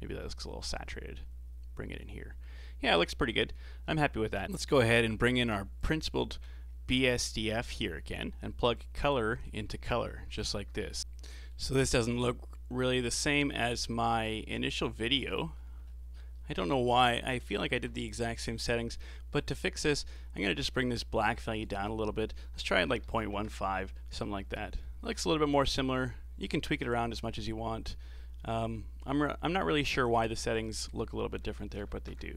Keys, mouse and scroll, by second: 4.4-5.0 scroll down 14, 4.4-4.9 middle drag, 5.8 click, 6.7 scroll up 3, 7.0 middle click, 7.4-8.5 scroll up 3, 8.7 click, 9.9-10.4 scroll down 1, 10.4 ctrl+shift+click, 11.0-12.4 middle drag, 12.4-13.0 scroll up 1, 13.0-15.6 middle drag, 15.6-16.2 scroll up 9, 16.4-17.6 middle drag, 17.6-20.6 drag, 21.5-24.6 drag, 24.8-26.9 middle drag, 26.9-29.9 drag, 30.5-32.3 drag.